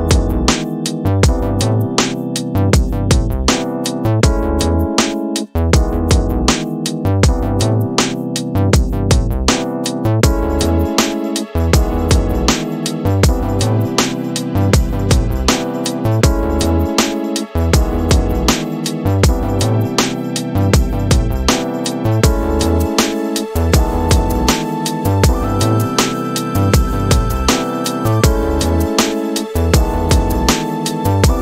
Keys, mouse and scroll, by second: 5.5 space, 10.6-11.7 drag, 17.7 click, 20.3-22.5 drag, 24.7 space.